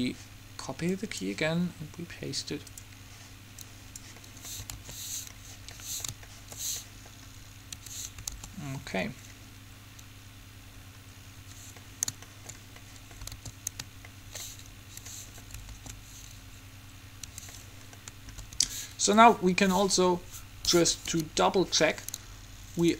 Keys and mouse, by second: 0.0-4.4 drag, 4.4 middle click, 5.0 alt+a, 7.9 Escape, 8.6 alt+a, 11.6 Escape, 13.5 alt+a, 15.0 Escape, 15.8 alt+a, 17.5 Escape, 18.7 alt+a, 19.3 Escape, 21.2 Home.